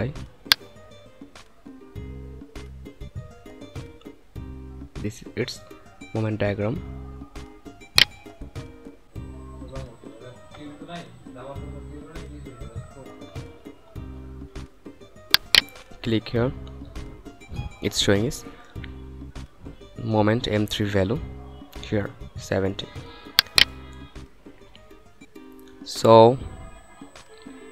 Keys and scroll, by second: 13.1 F9.